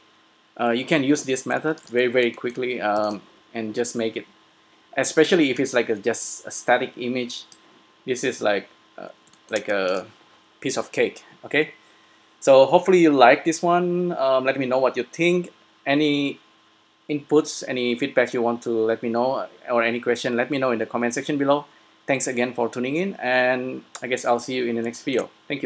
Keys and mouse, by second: 2.1 s, 3.0 s, 5.4 middle click, 5.8-7.5 drag, 8.7-9.9 middle drag, 9.9-11.6 drag, 9.9 s, 24.7 middle click.